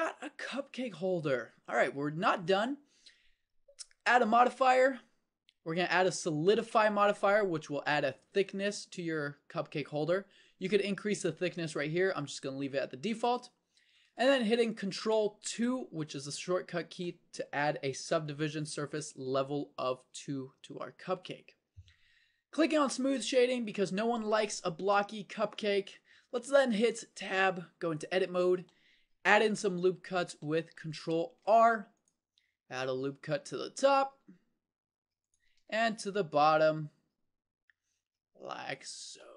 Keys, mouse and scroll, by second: 1.3 click, 4.1-6.6 drag, 15.6 ctrl+2, 22.9 click, 27.2 Tab, 31.5 ctrl+r, 35.6 ctrl+r.